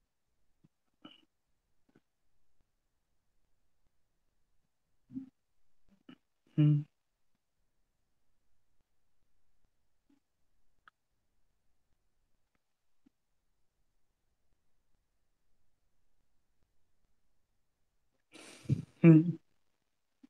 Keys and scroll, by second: 6.6 ctrl+z.